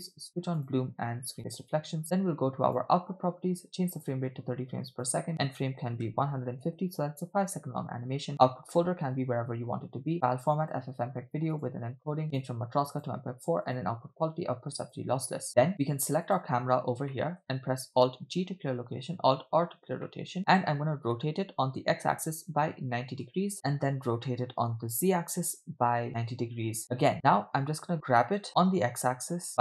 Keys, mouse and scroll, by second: 0.6 drag, 1.4 click, 2.7 click, 4.0-5.2 drag, 5.3-6.7 drag, 7.7 scroll down 3, 8.3 click, 9.0 /, 10.1-10.8 drag, 11.1-11.5 scroll down 2, 11.6 click, 11.8-12.3 scroll down 2, 12.3-13.1 drag, 13.7-15.0 drag, 15.5 scroll up 4, 16.2 middle click, 16.2 scroll down 3, 16.3 click, 17.2 middle click, 18.6 alt+g, 19.7 alt+r, 20.0-20.4 middle drag, 20.4-20.9 scroll up 3, 21.8 r, 23.5 middle click, 24.4 r, 27.1 middle click, 27.9-28.2 scroll down 2, 28.4 f, 28.5 g.